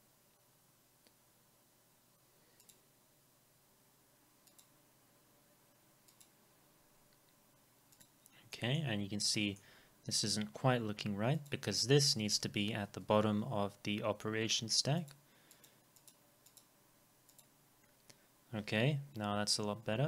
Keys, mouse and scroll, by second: 8.5 middle click, 9.0 scroll down 1.